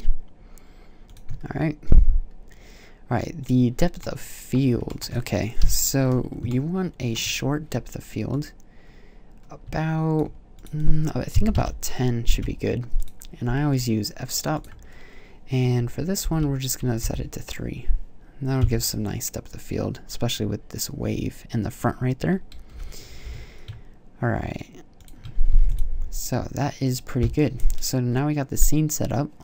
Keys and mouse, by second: 1.0-3.8 drag, 3.9 click, 5.4 KP_5, 8.9-11.9 drag, 18.4 KP_0, 22.6 g, 24.9-25.4 drag, 25.4 ctrl+s.